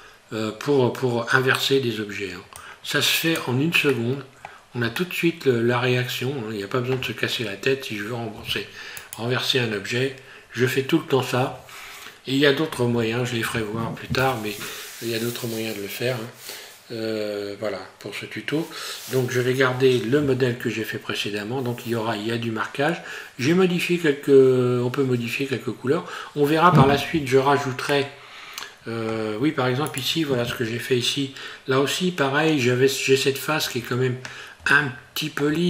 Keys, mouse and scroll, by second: 2.6 click, 3.9 middle click, 5.0 shift+middle click, 9.0 right click, 27.8 middle click, 29.9 right click, 34.7 shift+middle click.